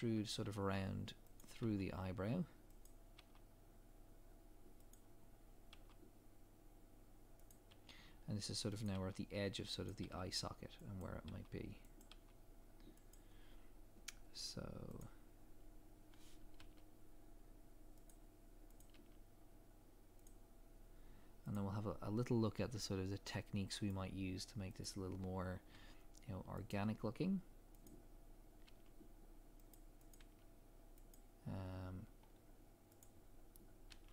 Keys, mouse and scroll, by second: 5.2 scroll down 1, 15.0 click, 16.6 g, 18.8 click, 18.9 g, 20.2 click, 22.5 g, 24.8 click, 25.7 g, 27.8 click, 28.7 g, 30.1 click, 30.2 g, 32.2 scroll up 1, 33.0 click, 33.9 g.